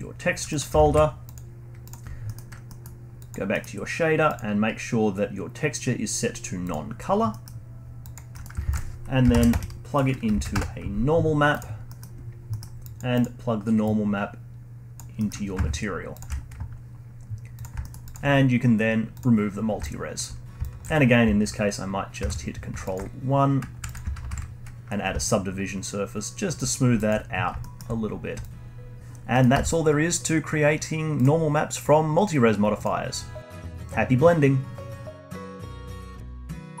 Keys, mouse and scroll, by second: 0.5 middle click, 0.8 ctrl+alt+s, 2.3 middle click, 3.2 click, 3.5 middle click, 3.7-4.3 scroll up 1, 4.3-7.3 drag, 7.3-8.0 scroll down 4, 7.3-7.8 middle drag, 8.0 click, 8.3 middle click, 8.6 shift+a, 11.9 middle click, 12.2-12.5 scroll up 1, 12.5-12.8 middle drag, 12.8-13.2 drag, 13.8 click, 15.2-16.2 middle drag, 16.2 ctrl+shift+click, 16.6-17.5 scroll up 1, 17.5 click, 17.8 alt+middle click, 18.0-19.6 alt+drag, 19.6 scroll down 2, 19.8 alt+click, 20.4 scroll up 2, 20.6 alt+click, 22.2 ctrl+1, 22.8-23.9 alt+drag, 24.3 ctrl+1, 25.2-26.7 alt+drag, 26.7-27.6 scroll down 2, 27.0 alt+click, 27.6-28.2 alt+middle drag, 28.2 scroll down 2, 28.4-29.0 alt+drag, 29.3 middle click, 29.5 z, 32.4-32.8 scroll up 1, 32.8 click, 33.8-36.8 alt+drag.